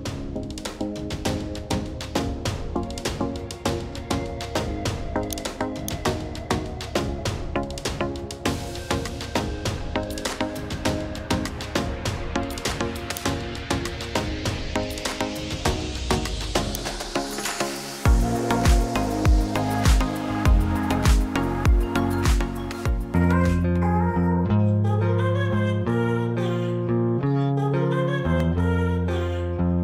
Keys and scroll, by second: 14.9 ctrl+h.